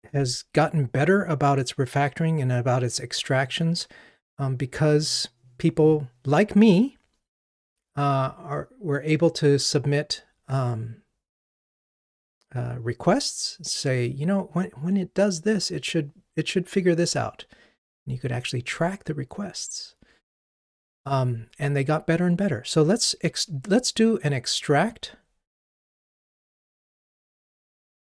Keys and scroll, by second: 26.8 alt+super+m.